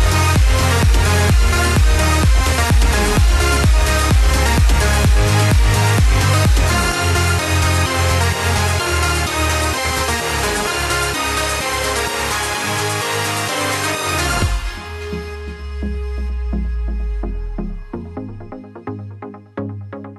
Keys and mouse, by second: 0.7 middle click, 3.3 middle click, 4.3 KP_1, 6.8 shift+middle click, 8.5 shift+middle click, 13.5 ctrl+f, 14.9 click, 17.2 click, 19.7 middle click.